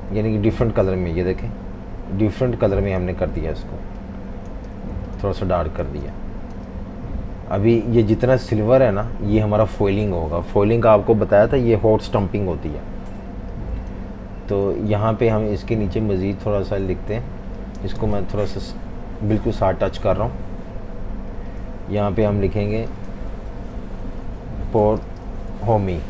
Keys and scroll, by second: 0.0-0.1 typing, 4.7-6.5 typing, 18.4 Left, 18.6 Left, 18.8 Left, 18.9 Left, 19.5 typing, 19.7 Left, 23.3 super+a, 24.1-25.0 typing.